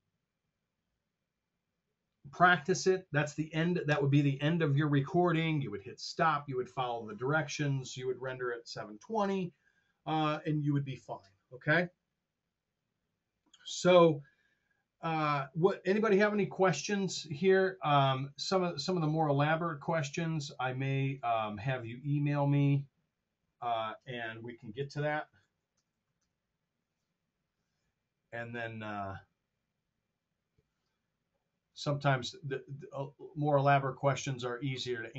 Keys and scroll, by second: 24.6-26.4 typing.